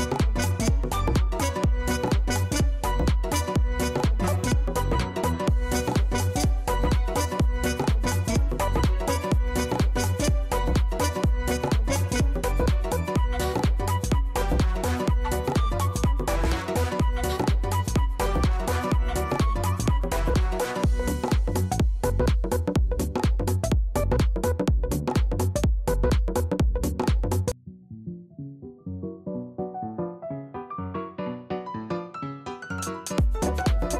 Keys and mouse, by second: 2.5 click, 3.2 click, 5.7 click, 6.4 click, 7.7 click, 9.3 click, 12.2 click, 12.7 click, 14.5 click, 18.1 click, 19.1 click, 20.5 click, 20.8 click, 21.9 click, 22.4 click, 24.7 click, 25.1 click, 25.4 click, 26.7 alt+click, 27.2 alt+middle click, 27.4 alt+right click, 27.6 alt+middle click, 27.8 alt+click, 28.0 alt+right click, 28.2 alt+middle click, 28.6 alt+middle click, 28.8 alt+click, 29.6 alt+click, 30.8 click, 33.1 click.